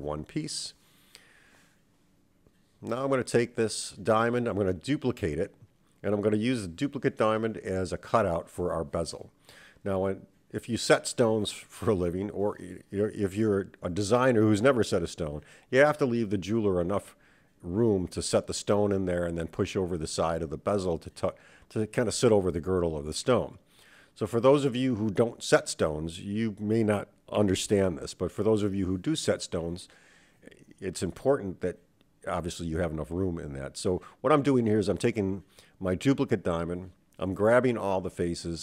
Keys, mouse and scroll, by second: 3.2 /, 4.7 shift+d, 6.9 /, 8.3 KP_1, 10.3 click, 11.6 Tab, 12.6-16.1 drag, 18.9 click, 21.5 click, 22.0-24.1 middle drag, 24.7 super+z, 25.4-27.1 middle drag, 26.9 KP_1, 28.1-29.3 scroll up 5, 29.3-30.0 scroll down 2, 30.7 n, 31.9 click, 33.2 a, 33.3 a, 35.1 click, 36.4-38.6 drag.